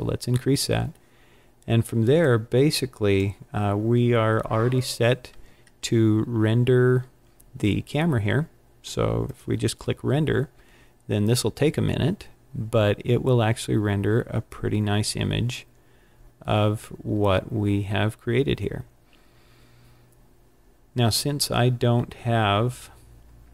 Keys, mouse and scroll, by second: 2.1 click, 9.1 click.